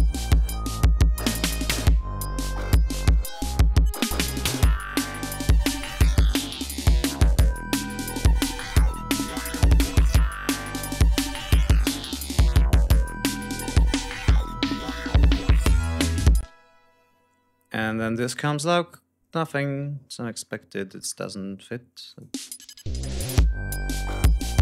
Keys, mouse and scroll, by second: 5.8 ctrl+scroll down 2, 6.1 ctrl+scroll up 2, 10.1 ctrl+scroll down 2, 12.5 ctrl+scroll up 2, 13.7 d, 14.3 ctrl+scroll up 2, 15.0 ctrl+scroll down 2, 16.0 ctrl+scroll up 2, 16.4 ctrl+space, 17.4-17.9 scroll up 2, 17.9 scroll up 1, 18.1-18.5 scroll down 2, 19.6-20.7 scroll down 7, 21.3 scroll down 2, 22.0 click, 22.3 space, 22.5 ctrl+scroll up 2, 24.1 click.